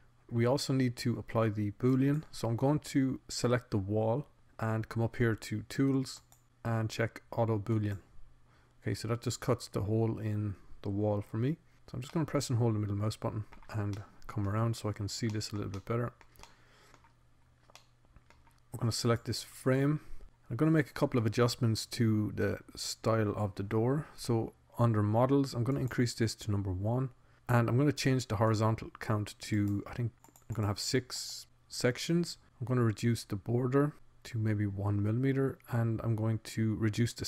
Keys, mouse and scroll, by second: 0.2-1.5 drag, 3.4-4.4 drag, 4.4 middle click, 5.3-6.8 middle drag, 6.8-9.2 drag, 9.4 click, 10.8 click, 13.8-15.0 middle drag, 15.6 middle click, 16.2 middle click, 17.2 middle click, 18.3-19.4 middle drag.